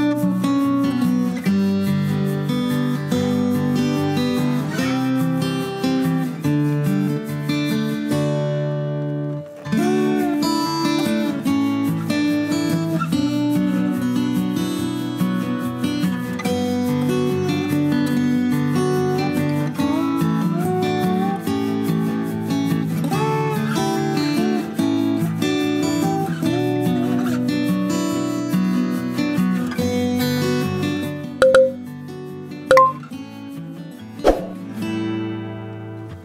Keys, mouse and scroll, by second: 0.7 a, 1.7 click, 2.6 ctrl+b, 5.9 KP_1, 7.3 click, 8.3 ctrl+click, 9.9 KP_3, 10.7 ctrl+click, 13.4 click, 14.5 KP_7, 16.5 click, 19.8 click, 20.9 click, 21.6 click, 22.5 click, 25.1 click, 26.1 click, 26.9 click, 27.7 click, 29.3 click, 30.9 Tab, 32.0 ctrl+KP_Subtract, 32.5 ctrl+KP_Subtract, 33.5 ctrl+KP_Subtract, 36.0 click.